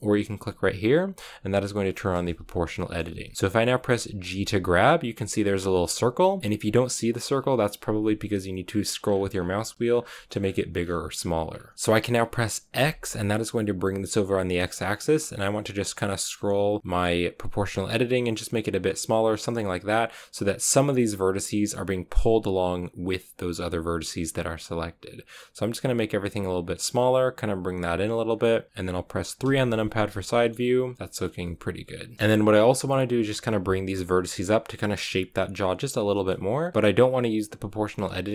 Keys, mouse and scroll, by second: 1.1 click, 1.4-2.7 drag, 2.7-4.2 shift+middle drag, 4.2 g, 28.2-29.3 scroll down 1, 29.3 KP_3, 30.2 shift+middle click, 31.2 scroll down 1, 31.3 middle click, 32.1 ctrl+z, 36.7 g.